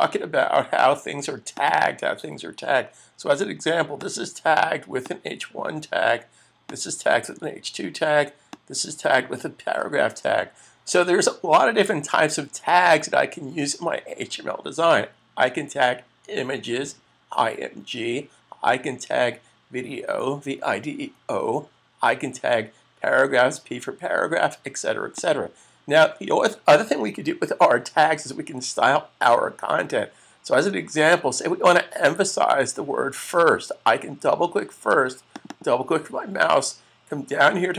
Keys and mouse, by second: 3.9 click, 25.0 click, 35.2 click, 35.4 double click.